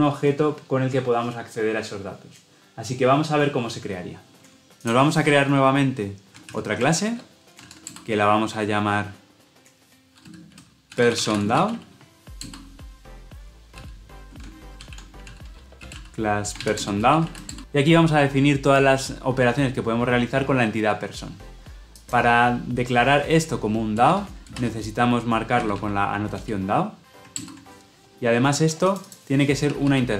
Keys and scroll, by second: 6.5 alt+Insert, 14.7 ctrl+z, 16.7 Return, 27.3 alt+Return.